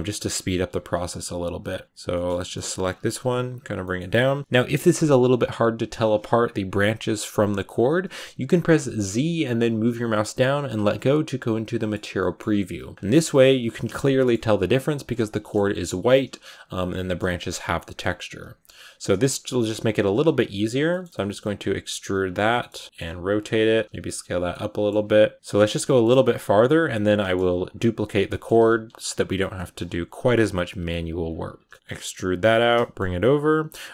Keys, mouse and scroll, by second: 0.0 middle click, 0.4 r, 0.7 g, 1.4 right click, 1.7 scroll up 1, 1.7 middle click, 1.8 right click, 2.0 shift+middle click, 2.5 g, 2.9 r, 3.3 g, 3.7 middle click, 3.8-4.4 scroll down 4, 4.3 middle click, 10.5 z, 11.3 scroll down 2, 11.5 middle click, 12.3-13.1 scroll up 4, 12.8 right click, 13.1 g, 14.0 middle click, 14.4 e, 15.1 shift+middle click, 15.7-21.6 typing, 16.8 middle click, 17.6 middle click, 20.8 middle click, 21.1 shift+middle click, 22.4 shift+middle click, 22.9 scroll up 1, 22.9-31.9 typing, 24.4 middle click, 25.8 shift+middle click, 27.1 middle click, 28.1 middle click, 29.4 middle click, 31.5 middle click, 32.4 shift+middle click, 33.1 r, 33.5 g, 33.8 r.